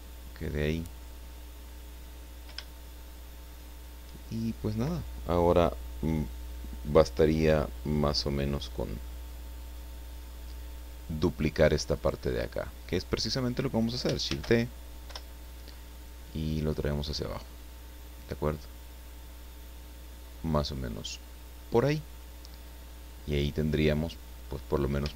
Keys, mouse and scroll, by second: 0.0-0.5 scroll up 2, 1.2-2.1 scroll down 4, 2.6-4.0 shift+drag, 12.0 right click, 14.2 shift+d, 15.0 Return, 16.6 click, 17.6-20.9 drag, 21.3-21.7 scroll down 1, 22.2 scroll down 1, 23.2-24.0 scroll up 1, 24.2 scroll down 2.